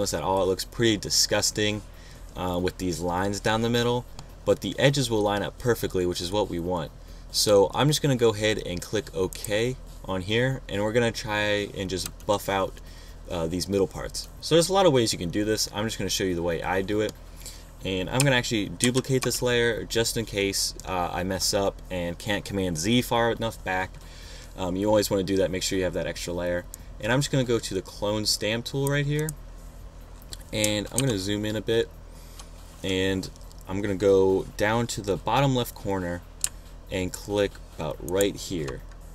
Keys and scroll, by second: 19.3 super+j, 31.5 super+=.